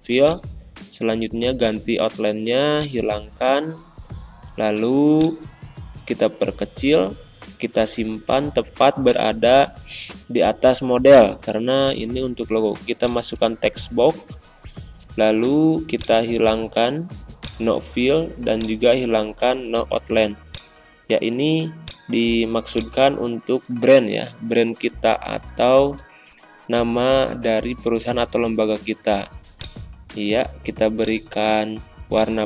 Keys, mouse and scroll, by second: 23.8-27.6 typing, 27.7 ctrl+a, 29.4 click.